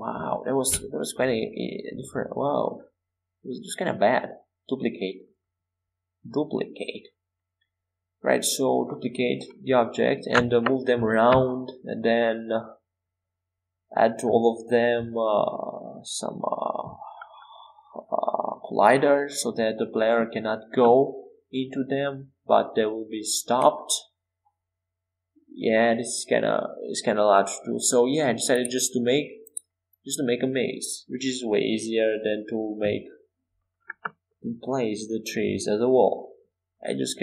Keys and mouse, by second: 4.5 e, 5.3 s, 6.9 e, 10.3 e, 10.9 s, 12.8 e, 15.6 e, 17.0 s, 22.0 e, 23.8 s, 25.4 e, 34.2 middle click.